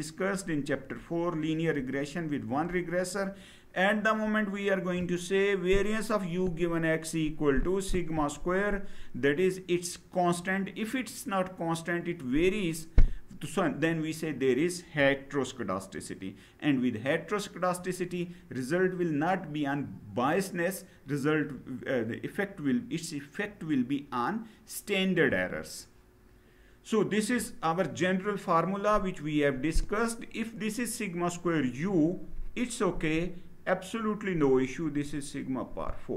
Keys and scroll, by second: 25.0 Down.